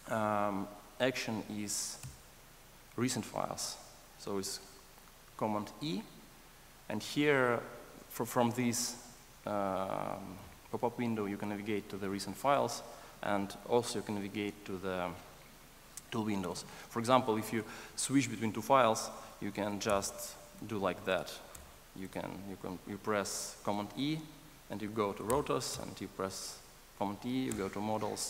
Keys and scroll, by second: 2.0 super+e, 19.6 super+e.